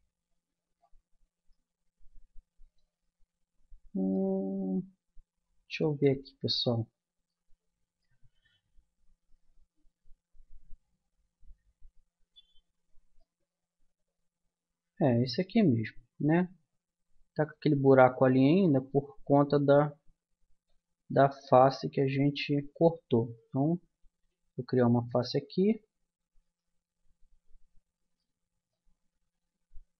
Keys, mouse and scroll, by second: 1.0 middle click, 3.3 middle click, 5.2 middle click, 5.5-8.9 middle drag, 9.6-11.4 middle drag, 13.2-15.1 middle drag, 15.8-17.4 middle drag, 21.2 click, 22.4 middle click, 23.0-24.8 drag, 24.5 f, 26.4-27.6 drag, 28.2-29.4 middle drag, 29.4 a.